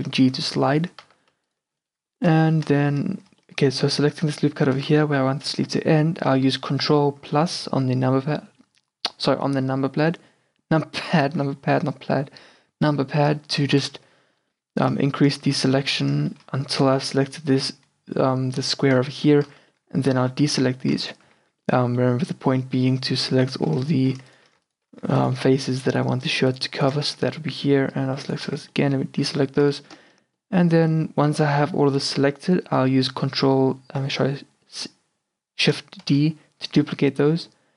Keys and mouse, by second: 0.0 a, 0.3 Tab, 0.6 z, 0.9 Tab, 1.1 z, 13.6 ctrl+KP_Add, 13.9 ctrl+KP_Add, 15.6 z, 16.8 ctrl+KP_Add, 19.6 z, 20.2 c, 21.4 z, 26.7 alt+shift+right click, 27.2 z, 27.8 c, 28.5 z, 29.3 q, 36.1 shift+d.